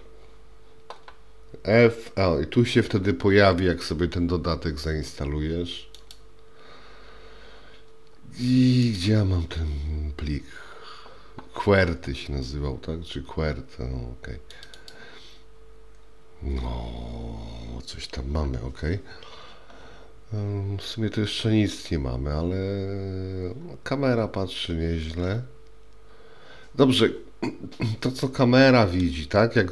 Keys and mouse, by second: 28.3-29.1 middle drag.